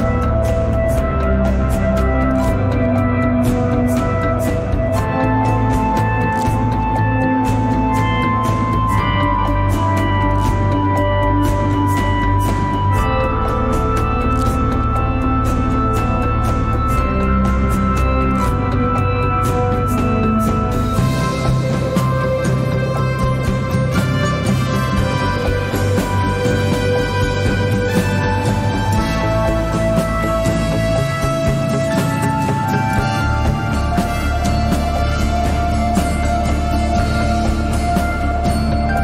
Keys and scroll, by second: 12.3 ctrl+z.